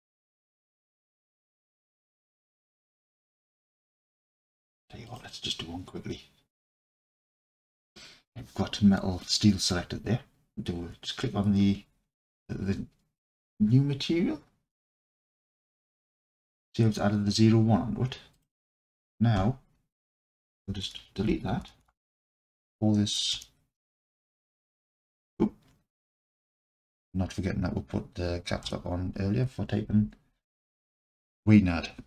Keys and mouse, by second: 15.2 click, 18.3-32.0 drag, 20.8-22.1 typing, 26.3 BackSpace, 26.4 BackSpace, 26.9 BackSpace.